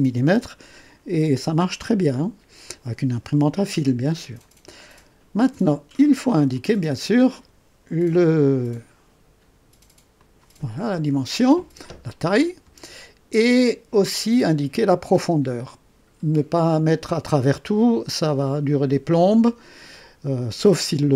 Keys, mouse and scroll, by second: 6.5 click, 10.1 click.